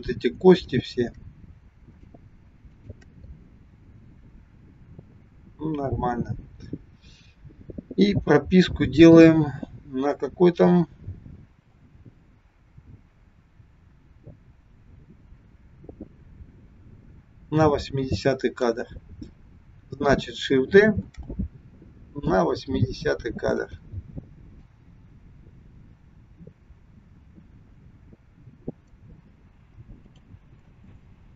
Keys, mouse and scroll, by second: 0.6 shift+click, 1.9 shift+click, 9.0 click, 11.9 click, 21.1 shift+d, 24.7 click, 30.0 click, 30.7 space.